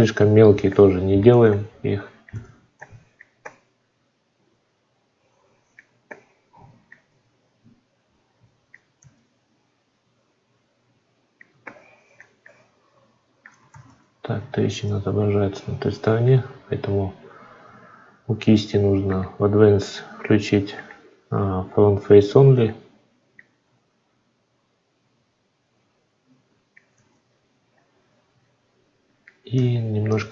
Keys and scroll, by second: 8.8 ctrl+z, 13.5 ctrl+z, 26.8 ctrl+z.